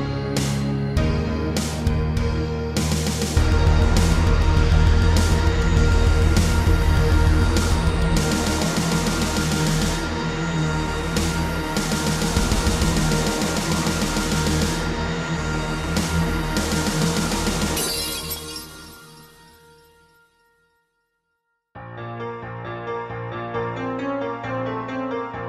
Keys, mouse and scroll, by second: 0.0 ctrl+r, 0.5 click, 0.7 click, 4.2 click, 5.9 s, 7.0-7.4 typing, 8.0 Return, 8.7 scroll down 3, 9.1 middle click, 9.6 scroll up 2, 10.5 Tab, 10.8 middle click, 11.3 a, 12.7 shift+middle click, 13.8 click, 14.4 Tab, 15.0 middle click, 16.0 z, 17.2 click, 17.8 a, 18.2 scroll down 2, 18.5 b, 18.8 click, 20.5 typing, 21.3 middle click, 21.9 7, 22.5 Tab.